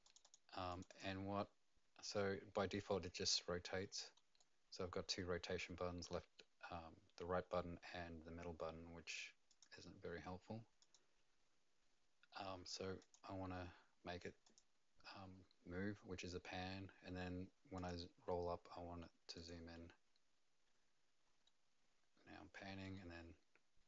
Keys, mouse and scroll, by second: 0.0 click, 0.2 click, 0.7 click, 0.9 click, 2.1 middle click, 4.4 right click, 9.5 click, 10.8 click, 12.5 click, 14.4 click, 17.7 click, 19.3 click, 21.4 middle click, 22.9 right click.